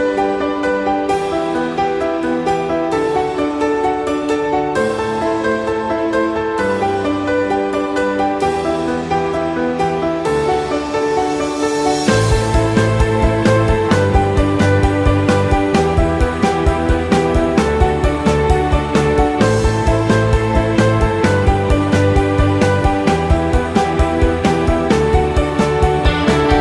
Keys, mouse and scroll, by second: 0.4-0.7 scroll up 1, 0.7 scroll down 1, 1.0 Tab, 1.0-1.9 scroll down 1, 3.0 click, 3.8 ctrl+r, 7.3 ctrl+r, 9.4 Tab, 9.6 middle click, 11.0 KP_1, 11.7 Tab, 12.9 click, 14.0 alt+z, 14.8 b, 18.8 shift+d, 21.0 alt+z, 21.3 middle click, 22.4 KP_1, 23.8 p.